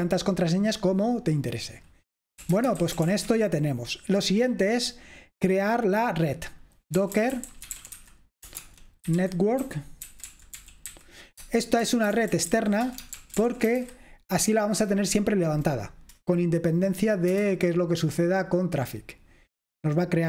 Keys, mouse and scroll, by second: 1.3 click, 2.3-3.6 typing, 5.0-6.7 drag, 6.8-14.3 typing, 6.8 click, 17.4 Return.